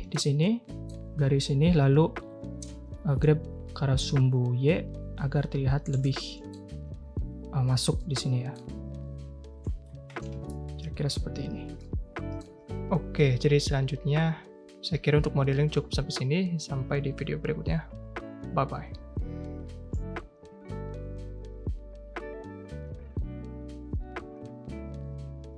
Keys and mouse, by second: 0.4 middle click, 1.8 g, 6.1 middle click, 7.9 middle click, 9.6 Tab, 10.1 a, 10.3 a, 10.4-11.1 middle drag, 11.8-12.3 drag, 13.3 click, 16.3 click, 16.6 a, 17.7 Tab, 18.1-18.9 drag.